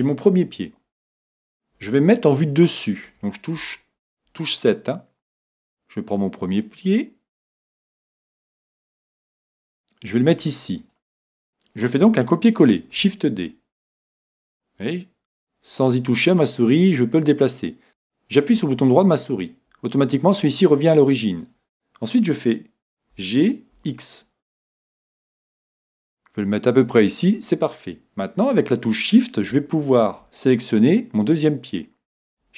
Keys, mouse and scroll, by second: 5.7-10.9 drag, 12.7 shift+d, 19.3 right click, 23.1 g, 26.9-28.7 drag, 29.9 right click.